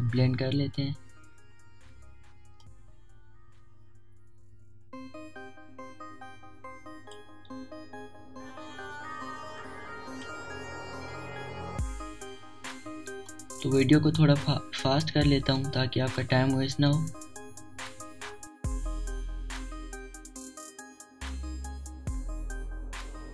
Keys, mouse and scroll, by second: 2.8 alt+scroll up 1, 3.7-10.6 drag, 10.6-12.9 drag, 10.6 typing, 12.9-13.3 alt+scroll down 1, 13.7 alt+scroll down 1, 14.3 space, 14.3 click, 15.3 alt+scroll up 1, 15.4 typing, 16.2 alt+scroll up 1, 16.7-17.9 typing, 16.8 click, 17.9-21.3 drag, 21.2 typing, 21.3-23.3 drag.